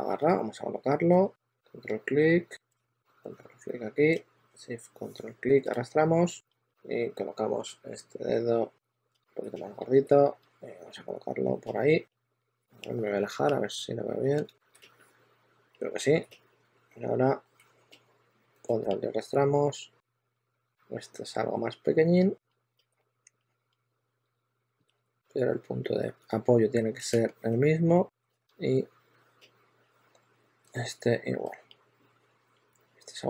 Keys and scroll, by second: 0.0 typing, 9.9 w, 11.1 q, 13.0 q, 16.4 w, 20.1 w, 22.1-25.9 typing, 26.9 shift+super+e, 27.4 shift+super+e, 28.2 shift+super+x, 28.3 w.